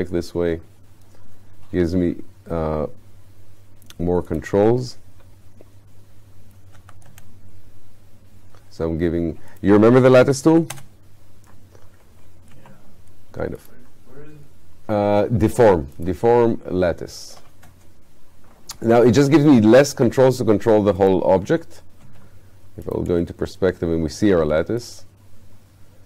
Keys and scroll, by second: 6.8 5, 10.5 5, 12.5 space, 22.1 space.